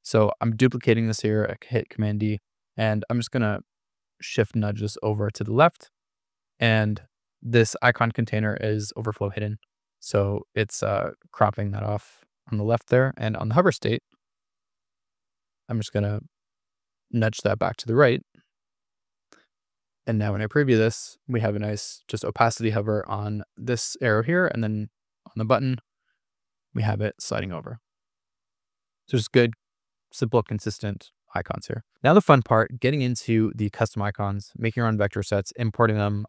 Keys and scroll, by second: 2.7 shift+Left, 14.3 shift+Right, 15.3 shift+Left, 29.4 Escape.